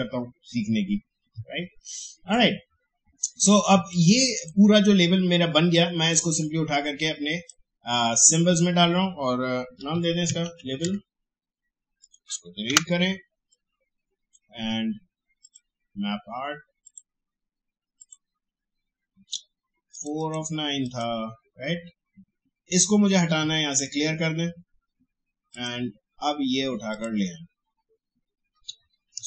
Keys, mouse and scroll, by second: 1.4-1.8 alt+scroll down 1, 2.1 space, 2.3 click, 2.6 space, 3.8-9.8 drag, 9.5-11.1 typing, 12.0 click, 12.6 Delete, 13.5-15.4 drag, 23.7 click.